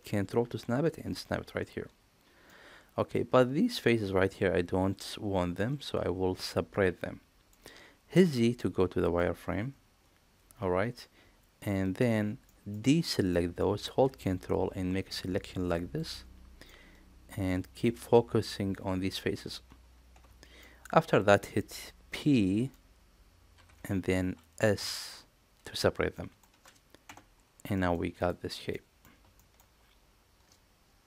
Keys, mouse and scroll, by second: 2.5 middle click, 2.7 click, 5.5 click, 5.7-7.5 middle drag, 8.0 z, 9.1-12.0 middle drag, 12.4 middle click, 13.3 middle click, 14.6-15.9 ctrl+drag, 16.6-17.8 middle drag, 20.1 z, 20.6 middle click, 23.5 p, 26.1 click, 27.0 Tab, 27.7 middle click, 28.1 click, 28.7 middle click, 29.3 shift+middle click.